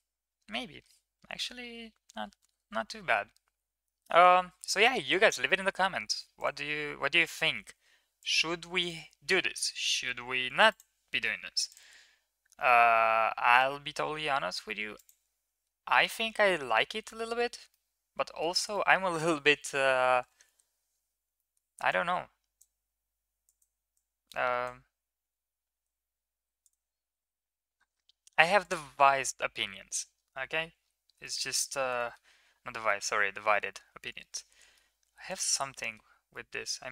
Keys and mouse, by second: 0.3 Tab, 2.2 ctrl+KP_3, 6.2 click, 7.1 shift+middle click, 8.2 click, 9.6 s, 11.5 click, 13.2 g, 16.9-17.2 middle drag, 17.5-18.2 middle drag, 18.6 middle click, 20.0 KP_1, 25.0 s, 29.1 middle drag, 31.1 shift+middle click, 31.9 shift+middle click, 33.5-34.7 middle drag, 35.6 middle click, 36.1-36.9 middle drag.